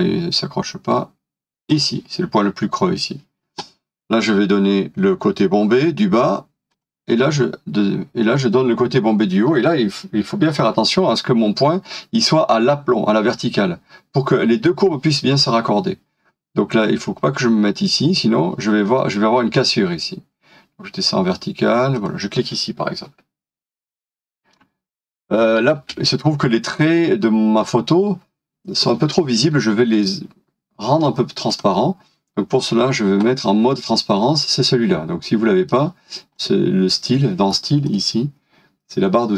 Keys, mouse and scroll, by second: 9.5 scroll up 1, 22.4 scroll down 1, 23.9 shift+middle click, 25.8 space.